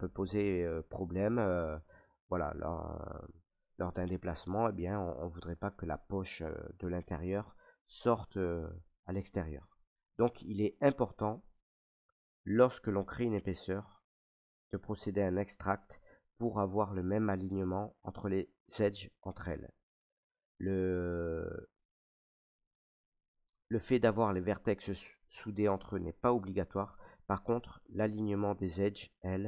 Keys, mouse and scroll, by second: 1.2-6.3 middle drag, 18.0-23.2 middle drag, 23.2-28.4 right drag, 25.7-27.1 middle drag.